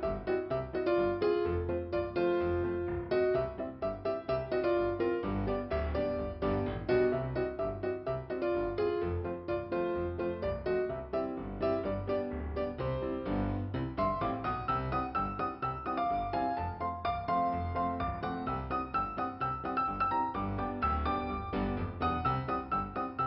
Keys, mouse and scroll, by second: 0.0 click, 1.8 click, 2.5 click, 3.8 scroll up 1, 7.2 click, 13.2 click, 13.5 click, 14.9 click, 17.0 click, 20.6 click, 20.7 click, 21.8 click, 23.1 click.